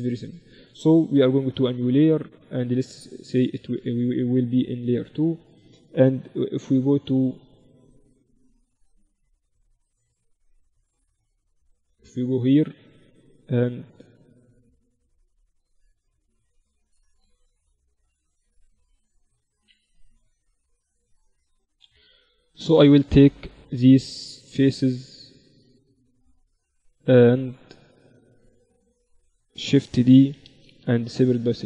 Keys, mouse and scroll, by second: 1.1 KP_1, 2.7-6.5 drag, 3.3-5.0 right drag, 6.1 KP_0, 6.5 KP_1, 7.6 KP_1, 9.1 KP_0, 14.8 Tab, 15.1 Tab, 15.5-17.1 right drag, 15.9 Tab, 19.9 KP_1, 19.9 KP_4, 22.9-24.8 drag, 23.3-25.7 right drag, 24.6-31.5 middle drag, 26.7 right click, 27.0-28.3 drag, 30.4 shift+d, 30.9 p, 31.5 Tab.